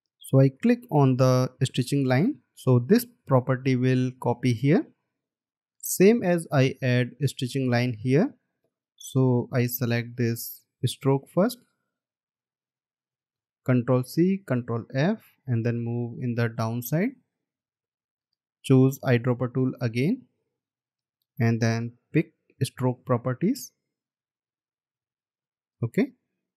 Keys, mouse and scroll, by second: 2.4 alt+scroll down 1, 5.6 space, 13.8 ctrl+c, 15.0 ctrl+f, 16.3 Down, 19.3 scroll down 1, 23.7 scroll up 1.